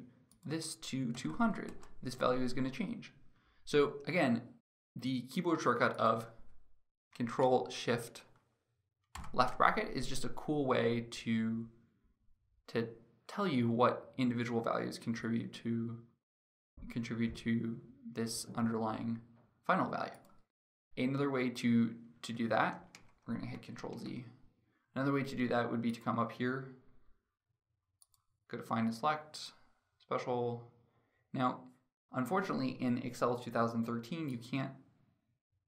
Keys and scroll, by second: 8.8 ctrl+shift+[, 22.2 ctrl+z.